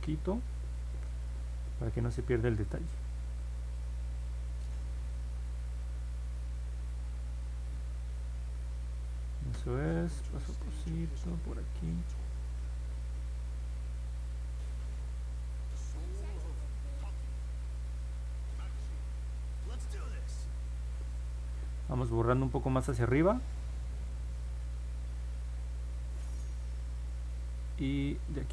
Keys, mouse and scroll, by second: 0.0 click, 0.3 click, 0.6 click, 0.9 click, 1.3 click, 1.7 click, 2.0 click, 2.3 click, 2.6 click, 3.0 click, 3.3 click, 3.7 click, 4.6-6.4 drag, 6.8 click, 7.2 click, 7.6 click, 8.1 click, 8.5 click, 9.0 click, 9.5 click, 10.0 click, 10.5 click, 11.0 click, 11.9 click, 12.4 click, 12.8 click, 13.3 click, 13.7 click, 14.1 click, 14.5 click, 15.0 click, 15.4 click, 15.9 click, 16.4 click, 17.3 click, 17.7 click, 18.2 click, 18.7 click, 19.1 click, 19.5 click, 20.0 click, 20.5 click, 21.0 click, 21.4 click, 22.0 click, 22.3 click, 22.7 click, 23.1 click, 23.4 click, 23.8 click, 24.1 click, 24.4 click, 24.8 click, 25.1 click, 25.4 click, 25.6 click, 25.9 click, 26.3 click, 26.5 click, 26.8 click, 28.3 click.